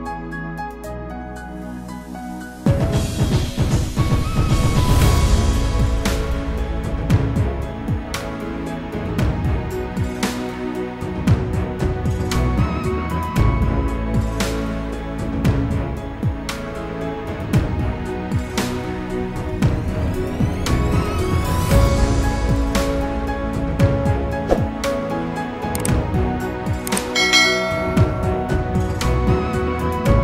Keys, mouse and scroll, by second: 7.5 click, 9.0 click, 9.4 double click, 9.8 scroll down 1, 10.0-10.5 scroll up 1, 10.5 click, 12.5 click, 13.9 click, 16.6-17.2 scroll up 1, 17.2-18.0 scroll down 1, 19.2 F4, 20.6 F9, 24.0 F9, 24.6 click, 27.3 click, 29.0 click.